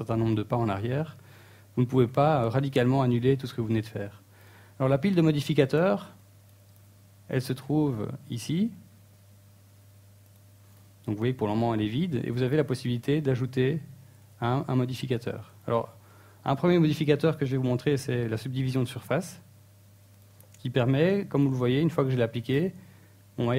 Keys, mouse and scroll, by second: 0.7 right click, 0.8 g, 1.2 right click, 7.4 KP_1, 7.8 KP_3, 9.1 a, 10.2 shift+middle click, 12.2 click, 13.7 click, 16.2 click, 20.1 Tab, 20.5 middle click, 21.3 shift+middle click, 22.6 click.